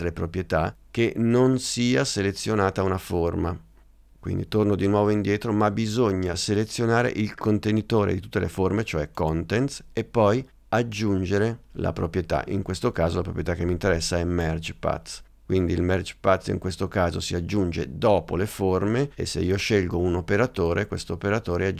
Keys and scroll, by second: 5.0 super+z.